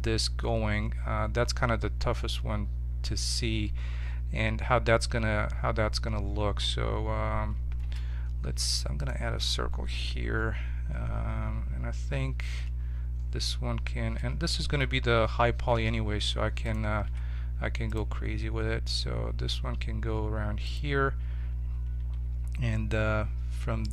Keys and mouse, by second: 7.7 shift+a, 12.4 t, 14.1 t, 15.6 g, 17.0 s, 18.1 g, 23.8-23.9 right drag.